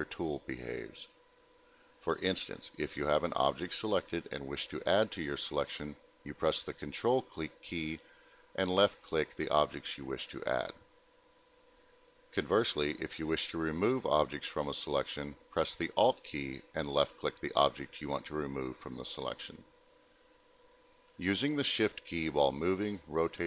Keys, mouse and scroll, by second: 0.5 ctrl+click, 1.6 middle click, 2.5 ctrl+click, 3.9 ctrl+click, 5.4 middle click, 6.1 alt+middle click, 7.5 middle click, 8.2 middle click, 11.8 alt+click, 12.9 alt+click, 15.6 ctrl+click, 19.3 alt+middle click, 19.5 middle click, 21.0 alt+middle click, 22.5 ctrl+click, 23.0 middle click, 23.3 alt+middle click.